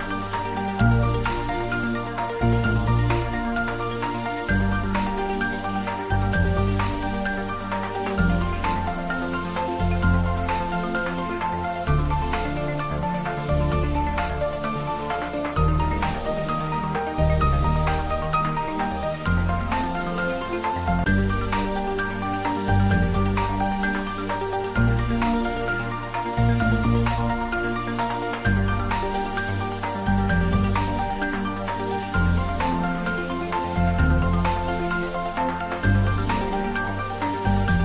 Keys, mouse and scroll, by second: 0.1 scroll down 1, 0.5-1.1 middle click, 1.0 scroll up 1, 1.9-3.1 click, 4.5 8, 4.9 Return, 6.0 Tab, 7.7-8.4 scroll down 1, 8.4-9.2 middle click, 8.9 click, 9.8 scroll down 1, 13.8-14.9 scroll up 1, 14.9 click, 17.2 scroll down 1, 18.2-19.2 middle drag, 19.7 scroll down 1, 22.6 click, 23.4-24.0 scroll down 1, 24.0 click, 25.2 shift+d, 25.6 r, 27.3 click, 28.2 g, 31.1 click, 33.6 click, 34.5 shift+d, 34.9 r.